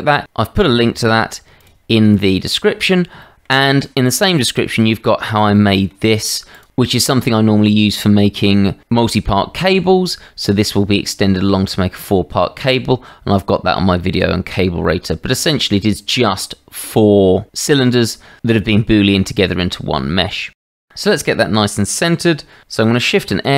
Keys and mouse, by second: 3.2 shift+middle drag, 4.5-4.9 drag, 4.5-4.9 right drag, 5.5-5.9 shift+middle drag, 6.5 click, 14.8-15.3 drag, 21.4-21.7 shift+drag, 23.2 shift+s.